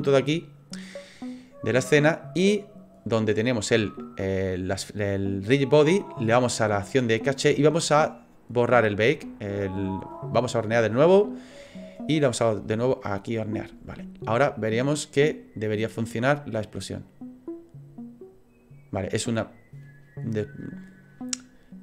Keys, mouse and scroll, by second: 1.3 click, 8.3 click, 12.3 click, 15.3 click.